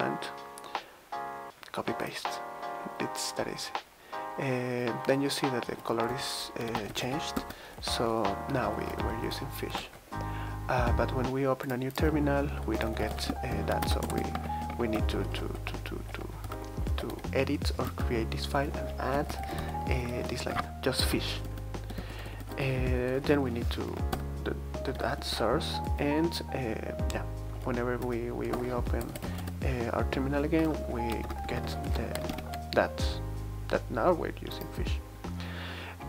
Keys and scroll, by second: 5.4-8.2 typing, 9.8 super+t, 12.5-25.8 typing, 20.2 Escape, 23.9 Tab, 25.8 Return, 26.2 super+t, 27.5 super+q, 28.0 Return, 28.5 super+space, 28.6-29.8 typing, 31.2 super+=, 31.5 super+=, 31.6 super+=, 32.2 ctrl+alt+Right, 32.3 ctrl+alt+Left.